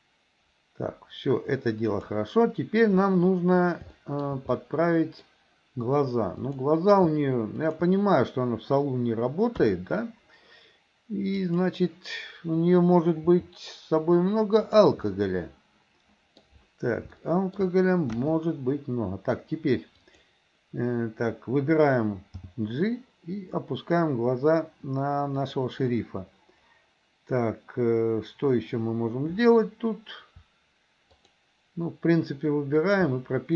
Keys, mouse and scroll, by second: 4.0 shift+middle drag, 4.6-5.3 middle drag, 6.4 click, 9.6 KP_3, 11.6 click, 13.4 r, 15.1-16.4 middle drag, 17.2-17.6 shift+middle drag, 18.1 KP_1, 22.5 g, 31.1 shift+click, 32.8 shift+click.